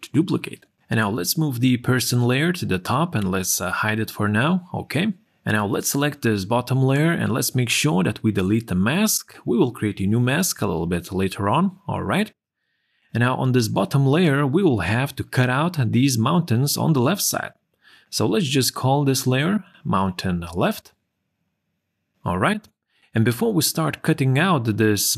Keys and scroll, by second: 20.3-22.1 typing.